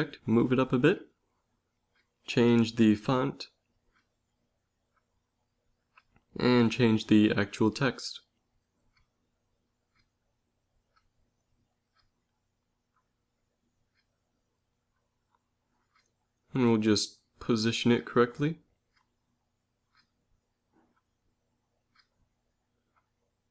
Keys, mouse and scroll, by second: 2.1 click, 5.4 Tab, 6.0 ctrl+a, 9.3-11.9 typing, 13.2-14.2 typing, 14.9 Tab, 15.9 click, 18.4 g, 21.7 g, 23.4 a.